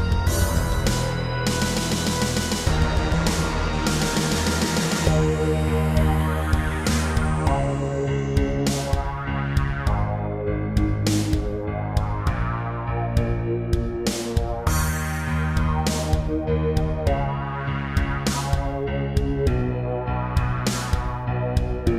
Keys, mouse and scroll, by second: 0.9-1.6 typing, 2.9 click, 3.5 ctrl+r, 4.0 click, 4.9 typing, 6.5 y, 9.6 click, 10.2-12.0 typing, 10.3 click, 14.6 click, 16.2 ctrl+r, 16.8 click, 17.0 click, 18.1-20.3 typing, 19.2 Escape, 20.4 click.